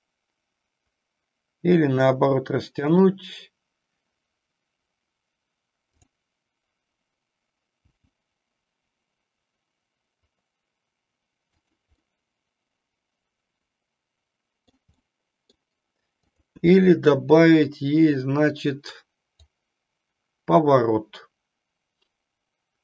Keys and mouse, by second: 3.0 click, 6.0 click, 8.0 g, 12.1-14.7 middle drag, 15.0 middle click, 16.3 click, 19.5-22.8 drag.